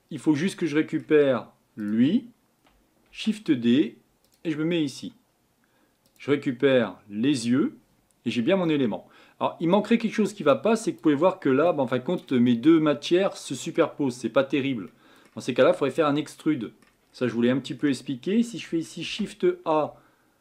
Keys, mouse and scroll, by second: 3.1 shift+d, 7.4-13.1 drag, 13.1-14.0 middle drag, 14.0-14.6 scroll up 3, 14.6-15.0 scroll down 2, 15.0-15.5 middle drag, 15.5-15.9 scroll up 2.